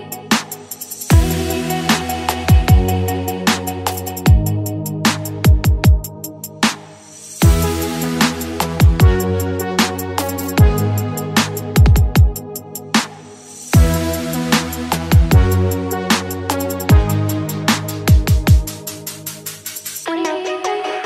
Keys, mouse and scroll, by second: 1.2 click, 1.7 middle click, 2.2 shift+click, 3.0 click, 4.0 click, 4.4 shift+click, 5.3 click, 6.3 click, 8.1 click, 8.6-10.3 middle drag, 10.3 shift+click, 10.9-12.6 middle drag, 12.6 click, 14.1 click, 14.6 middle click, 15.5 click, 17.1-18.3 middle drag, 18.3 ctrl+z, 18.9 shift+click, 19.9 click.